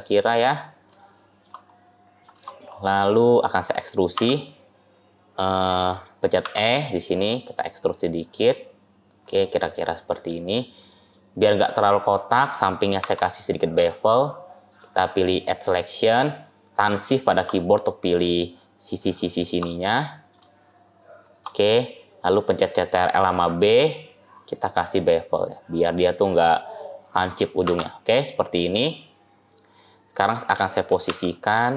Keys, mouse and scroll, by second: 0.1-0.9 scroll up 6, 0.9 shift+middle click, 1.5 middle click, 2.4-3.5 scroll up 6, 3.5 click, 4.0 Tab, 4.3 click, 6.3 e, 9.3 middle click, 10.3-10.6 scroll down 1, 10.7 middle click, 11.8 click, 12.9 2, 13.5 click, 14.0 middle click, 15.5 scroll down 1, 15.8 shift+middle click, 17.1 shift+click, 17.5 middle click, 19.2 shift+click, 19.7 middle click, 21.1 shift+click, 21.5 middle click, 22.2-22.6 scroll down 1, 23.1 ctrl+b, 27.5 Tab, 28.0 middle click, 28.4 scroll up 1, 28.6 click, 28.9-29.6 scroll down 3, 29.6 middle click, 30.8 g.